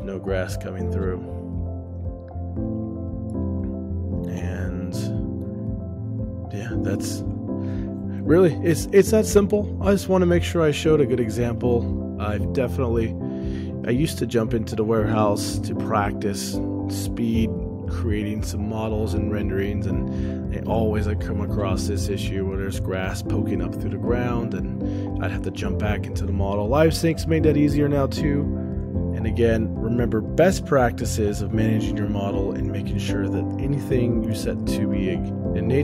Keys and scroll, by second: 7.6 ctrl+alt+o, 29.5 shift+space, 30.0 ctrl+alt+o.